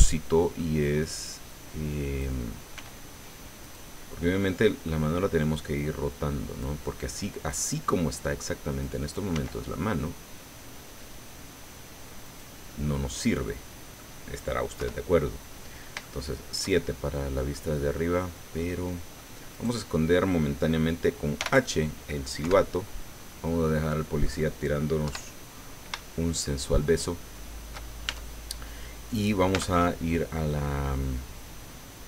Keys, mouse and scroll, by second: 1.4 click, 2.7 s, 3.6 click, 4.4 middle click, 5.8-6.8 drag, 7.5-9.0 drag, 9.3 s, 12.2 click, 13.4 middle click, 14.8 KP_7, 16.0 shift+middle click, 16.8-17.4 shift+scroll up 5, 17.5-19.4 drag, 19.5 right click, 21.4 h, 22.4 KP_7, 23.0-24.4 drag, 25.0 KP_7, 26.0-27.9 shift+drag, 28.0 shift+Tab, 29.0 right click, 29.5 Tab.